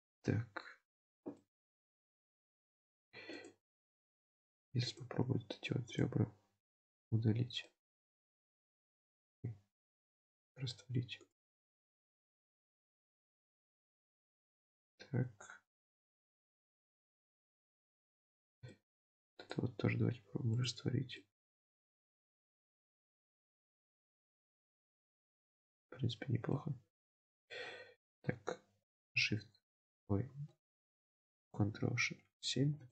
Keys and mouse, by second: 1.4-2.9 middle drag, 3.4 click, 4.9 shift+click, 5.3 x, 7.0 Tab, 7.6-8.8 middle drag, 9.0 ctrl+z, 10.4 x, 11.9 middle click, 12.3 Tab, 13.0-15.8 middle drag, 15.9 Tab, 16.5 Tab, 17.0-17.8 middle drag, 18.2 Tab, 18.8 shift+middle click, 19.5 click, 19.9 x, 21.3 middle click, 21.6 Tab, 22.2-24.1 middle drag, 24.8-26.6 middle drag, 27.6 KP_7, 29.3 shift+KP_7, 31.4 ctrl+KP_7.